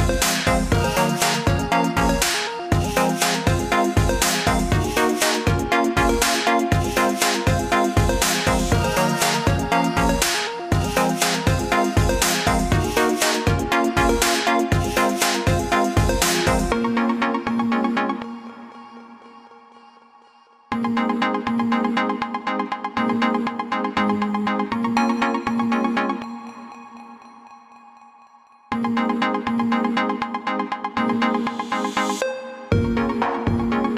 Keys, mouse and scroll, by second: 2.0-2.4 scroll down 2, 3.2 scroll down 1, 3.7 scroll up 1, 5.3 scroll up 1, 6.5 click, 8.6 scroll down 1, 10.9 scroll up 1, 11.0 scroll down 1, 11.2 scroll up 1, 11.6-12.2 scroll down 2, 12.6 scroll up 1, 13.6 scroll up 1, 14.9 click, 18.3 click, 28.0 click, 29.8 click, 30.8 click, 31.9 click.